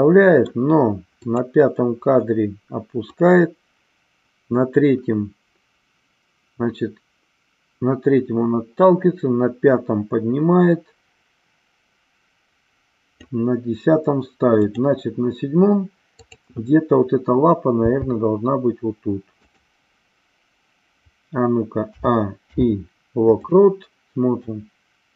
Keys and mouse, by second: 1.1 click, 3.1-13.2 drag, 14.5 click, 16.1-17.0 drag, 17.8 g, 21.9 a, 22.4 i, 24.4-25.1 drag.